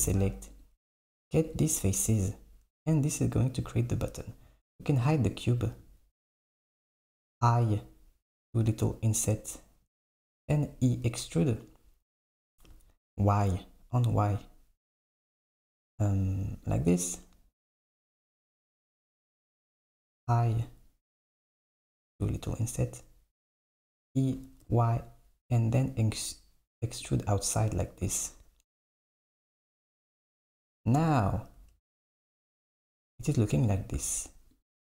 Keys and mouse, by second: 1.5 shift+click, 5.4 click, 10.4 e, 23.7 e, 31.6 Tab, 32.2 click, 34.6 click.